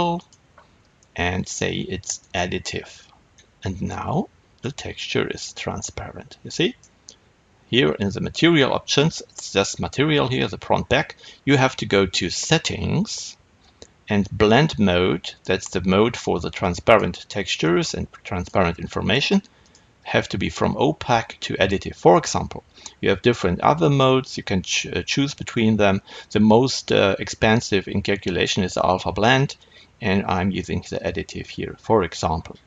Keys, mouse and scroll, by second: 0.3 click, 2.3 click, 3.2-17.7 middle drag, 17.7-32.6 drag.